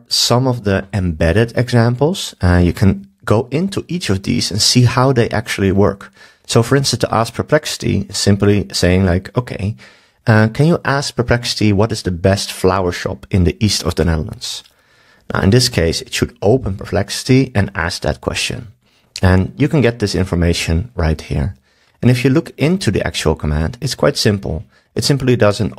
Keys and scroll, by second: 9.2 super+s.